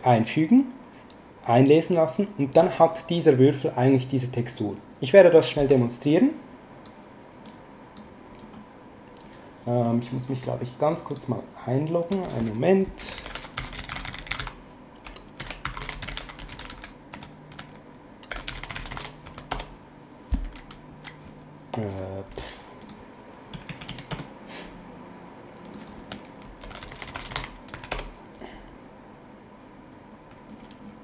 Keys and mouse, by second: 5.3 click.